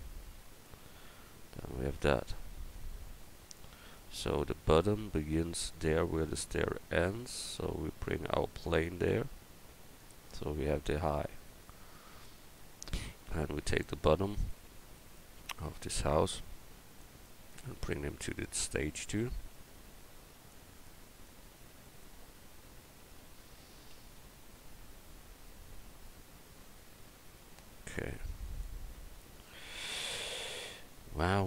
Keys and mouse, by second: 0.2 q, 3.8-6.0 right drag, 6.0-7.7 drag, 11.5 right click, 12.0 Tab, 12.7-17.0 right drag, 16.1-17.3 drag, 17.2 right click, 17.4-20.5 right drag, 21.0 click, 21.6 Tab, 21.8-23.9 right drag, 23.9 g, 30.2-31.4 middle drag.